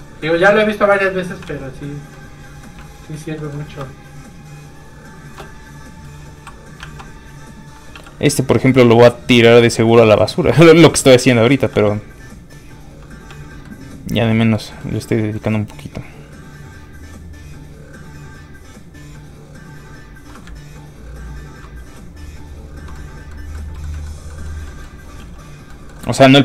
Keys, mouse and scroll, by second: 1.5 alt+shift+z, 2.7 middle click, 2.8 shift+middle click, 3.0 middle click, 3.1 middle click, 3.8 shift+space, 6.0 space, 6.1 f, 6.2 click, 6.8 alt+shift+z, 7.9 alt+z, 8.0 f, 8.1 click, 11.3 middle click, 11.7 f, 11.8 click, 12.9 f, 13.0 click, 13.3 f, 13.4 click, 13.6 middle click, 14.4 shift+middle click, 16.0 click, 16.0 middle click, 20.5 ctrl+click, 21.8 click, 21.9 f, 22.0 click, 22.9 middle click, 23.7 shift+middle click, 25.2 shift+f, 25.3 click, 25.7 middle click, 26.2 click.